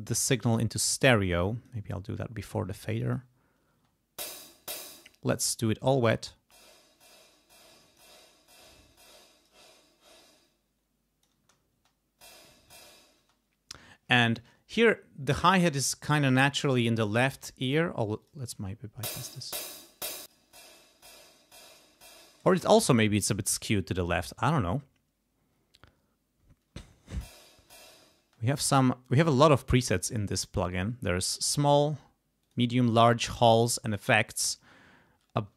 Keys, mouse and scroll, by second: 0.8 click, 2.3 click, 2.9 click, 3.7 space, 4.1 click, 4.8 space, 5.0 click, 6.0 space, 6.2-8.1 drag, 9.3 click, 10.2-11.4 drag, 11.3 space, 13.2 space, 18.2 click, 18.5 space, 20.2 click, 22.4 space, 26.7 space, 28.1 space, 31.8 click, 32.4 click, 32.8 click, 33.3 click, 33.8 click.